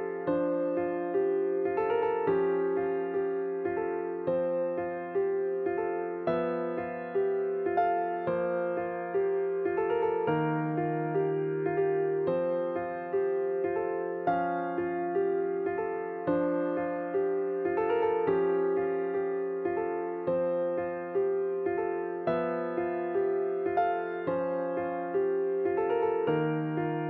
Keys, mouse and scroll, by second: 0.6-6.1 drag, 8.5-9.5 drag, 9.5 ctrl+v, 11.4-12.1 drag, 12.3 ctrl+v, 13.3-14.1 drag, 14.1 ctrl+v, 15.6-16.5 drag, 16.5 ctrl+v, 18.8-24.6 drag.